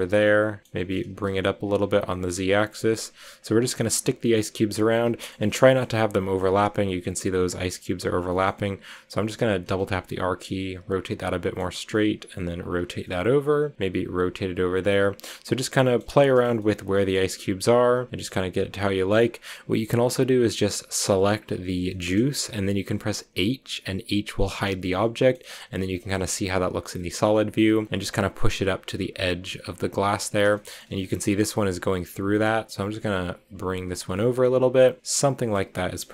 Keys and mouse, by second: 0.0-1.0 typing, 0.2 middle click, 2.0 click, 2.3 r, 2.8 click, 3.0 g, 3.2 drag, 4.2 click, 6.5-6.9 drag, 8.4-8.9 middle drag, 9.5 r, 9.6 r, 10.7-11.7 drag, 11.7 g, 12.4 drag, 13.6 drag, 13.8 r, 14.4 drag, 15.6-16.0 drag, 16.0 a, 16.3 drag, 16.5-17.3 drag, 17.3 z, 18.1-18.6 middle drag, 19.0-20.5 middle drag, 22.2 middle click, 24.6 h, 25.2 middle click, 25.5 g, 25.9 drag, 26.7 click, 27.1 g, 27.6 click, 27.8 g, 28.4 click, 28.7 r, 29.0 click, 29.2 g, 29.6 click, 30.6 middle click, 31.7 click, 32.2 click, 32.6 g, 33.6 drag, 35.3 middle click, 35.8-36.1 middle drag.